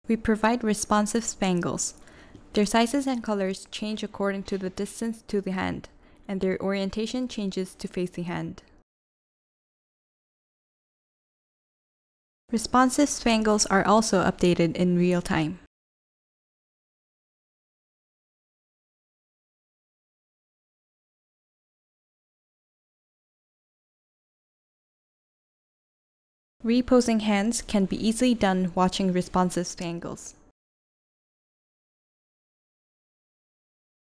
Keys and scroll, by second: 2.6 v, 6.6 v, 11.5-12.3 typing, 26.4-27.2 typing.